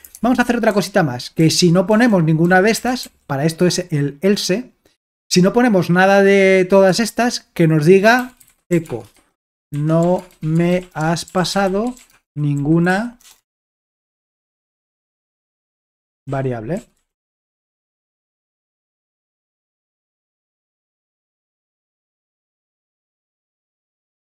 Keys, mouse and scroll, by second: 0.2 alt+Tab, 0.7-3.5 typing, 6.9 Return, 7.9-13.7 typing, 14.7-23.5 typing, 21.2 Escape.